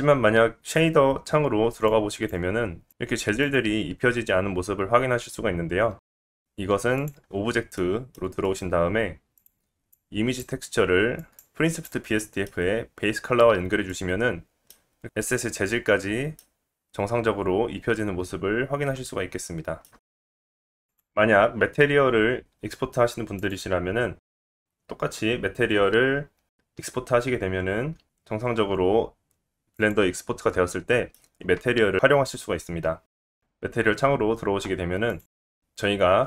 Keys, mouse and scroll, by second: 1.6 middle click, 2.4 click, 2.6 middle click, 2.7 scroll up 1, 2.9 middle click, 3.4 click, 4.5 scroll down 1, 5.6-9.4 drag, 6.0-6.4 middle drag, 6.0-6.4 right drag, 7.7 middle click, 9.4-9.9 middle drag, 9.9-19.9 drag, 16.2 scroll up 3, 16.9-17.8 scroll down 1, 17.8-19.9 middle drag, 17.8-19.9 right drag, 20.4 click, 20.6 click, 20.8-28.5 drag, 21.7 shift+a, 24.9-26.6 scroll up 3, 28.5-31.5 middle drag, 31.5-36.2 right drag, 33.0 click, 34.7-36.2 drag, 34.7-36.2 middle drag.